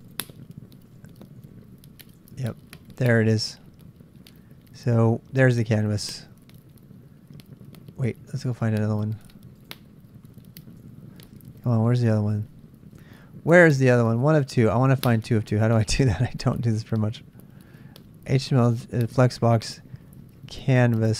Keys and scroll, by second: 0.7-2.5 typing, 10.8 BackSpace, 11.6 s.